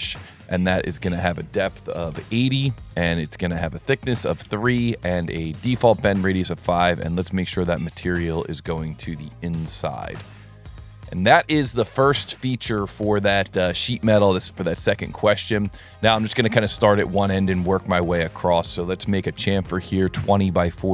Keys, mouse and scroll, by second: 1.1 click, 2.1 Tab, 2.8 Tab, 3.2 Tab, 4.5 Tab, 5.7 Tab, 7.1 click, 7.8 click, 8.4 click, 10.0 click, 10.4 click, 10.8 middle drag, 13.5 middle click, 14.1 scroll, 14.4 scroll, 14.6 scroll, 16.0 click, 18.4 click, 20.8 click.